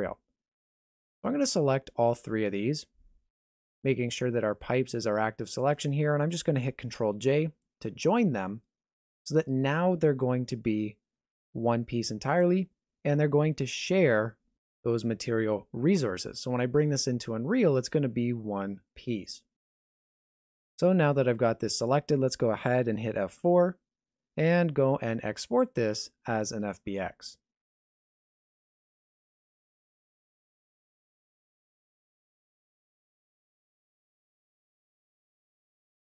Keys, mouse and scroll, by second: 2.1 shift+click, 4.6 g.